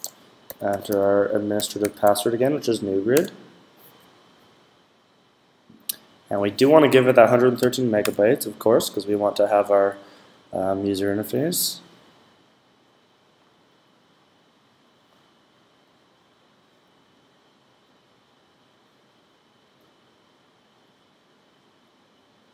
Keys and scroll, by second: 0.1-2.4 typing, 7.5 typing.